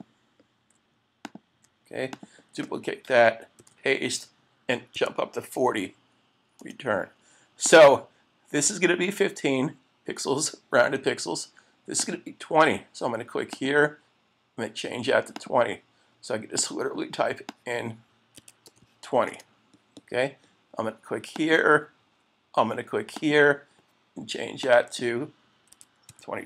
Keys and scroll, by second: 0.7 Up, 3.6 super+v, 6.6 Return, 19.3 Return.